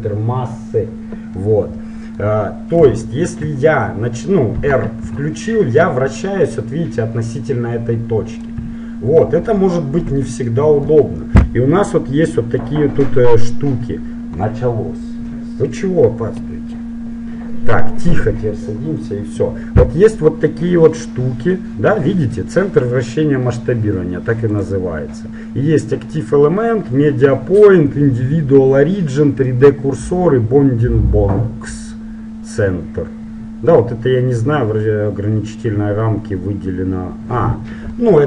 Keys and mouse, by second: 1.5-3.8 middle drag, 5.3 r, 9.0-12.2 middle drag, 24.5-26.4 drag, 38.1-38.2 middle drag.